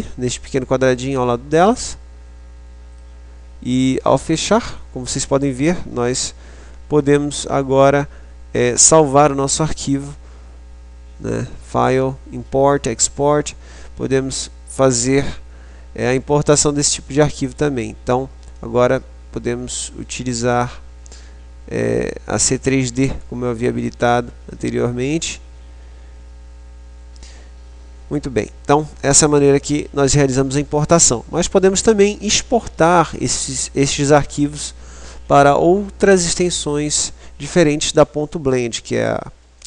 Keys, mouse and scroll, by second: 11.7 click.